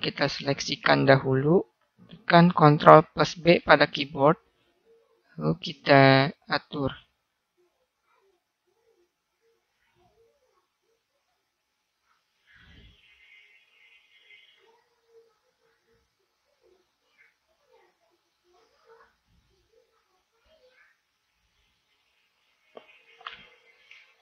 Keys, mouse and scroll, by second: 0.3-1.6 drag, 3.5 ctrl+b.